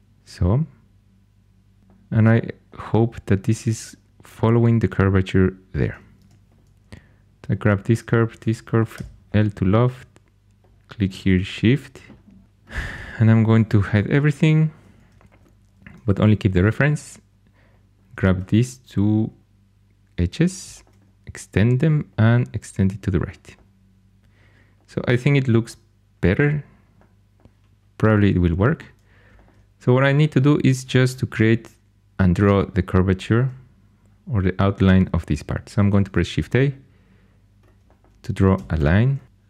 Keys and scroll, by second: 6.1 2, 8.9 i, 13.5 shift+h, 16.0 2, 35.9 shift+s, 38.7 shift+a.